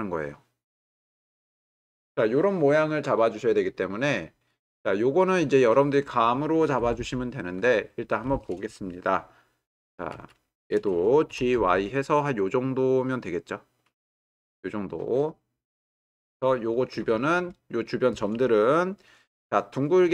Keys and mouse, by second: 4.4-5.6 drag, 10.1 w, 11.3 g, 11.6 y, 12.8 click, 19.4-20.1 middle drag.